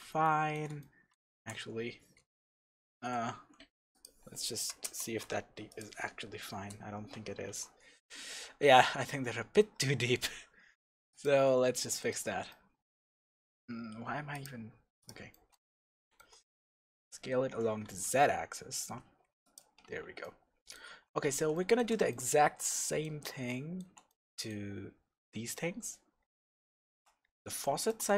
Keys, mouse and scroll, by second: 1.3 shift+z, 3.1 z, 3.6-3.9 middle drag, 3.9-4.4 drag, 4.6 Right, 4.8 KP_0, 5.8 click, 6.5 KP_0, 7.5 shift+z, 8.4 alt+a, 8.9 shift+z, 11.1 click, 11.9-14.3 middle drag, 14.3 click, 15.0 click, 15.3-19.5 middle drag, 16.5 s, 19.5 click, 19.9 Tab, 19.9-28.1 middle drag, 20.9 Tab, 26.2 scroll up 2, 27.2-27.6 scroll up 2.